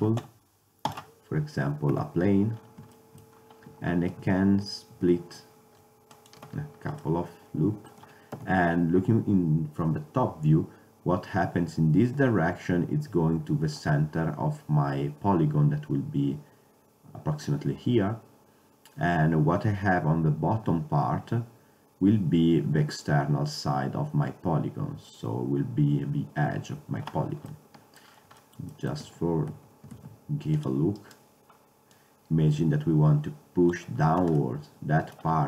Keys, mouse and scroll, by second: 2.0 KP_7, 3.8 Tab, 5.0 ctrl+r, 8.4 KP_7, 27.6 middle click, 29.1 Tab, 29.6 Tab, 34.5-35.4 middle drag.